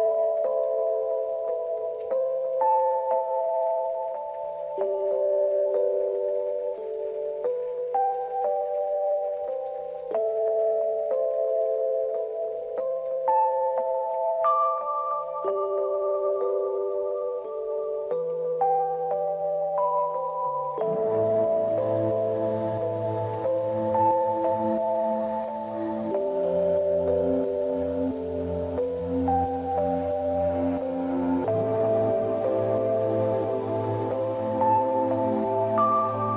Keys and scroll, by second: 0.6 space, 4.1 ctrl+=, 4.2 ctrl+=, 4.6 ctrl+-, 5.4 ctrl+=, 5.4 ctrl+=, 6.0 space, 7.6 space, 16.2 space, 21.5 space, 23.3 space, 29.1 space, 35.0 space.